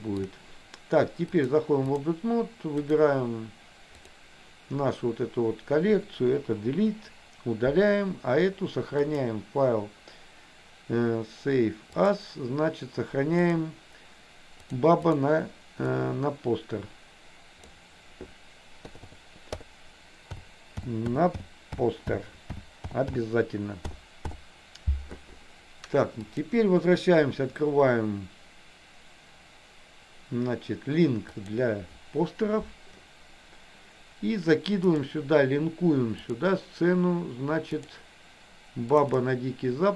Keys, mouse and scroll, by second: 1.4 click, 2.8 click, 6.8 Delete, 9.2-12.4 drag, 26.5-31.8 drag, 35.0-36.7 drag.